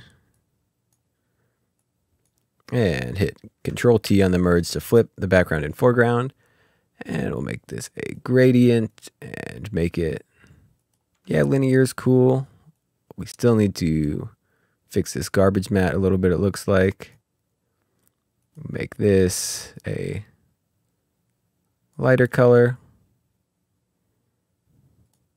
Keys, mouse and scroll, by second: 0.1 click, 1.5 click, 5.3 click, 7.1 click, 10.8 click, 11.4 scroll down 1, 12.8 scroll down 1, 13.0 click, 15.8 click, 21.6 click, 22.0-22.3 scroll up 2, 23.1 ctrl+scroll down 1, 23.7 click.